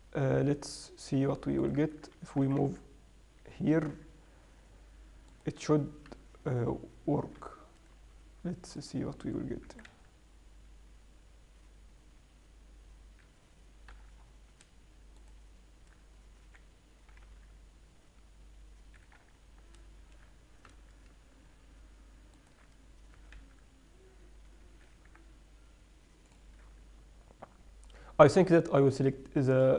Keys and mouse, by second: 0.8-2.0 middle drag, 2.0-2.8 right drag, 2.8 g, 3.6 click, 5.7 click, 6.5 n, 10.2 g, 14.3 n, 14.6-15.6 middle drag, 15.6-17.5 right drag, 16.9 r, 19.6-22.8 middle drag, 21.1 n, 22.8-24.6 drag, 23.6 g, 26.6 click.